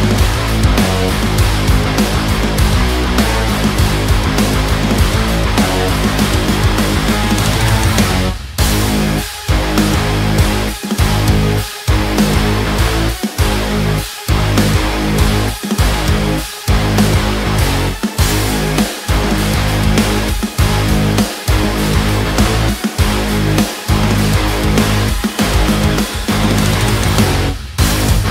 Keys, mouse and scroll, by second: 0.6 click, 3.1-7.0 drag, 7.0-9.4 drag, 10.3-12.2 drag, 12.9 b, 13.7 click, 16.7 click, 17.7 ctrl+space, 18.5 click, 20.0 ctrl+space, 20.5 click, 20.8 space, 21.1 click, 21.2 space, 21.3-22.5 drag, 22.9 space, 23.0 click, 23.1 space, 23.9 ctrl+space, 24.4 click, 24.5 space, 25.5-28.3 drag.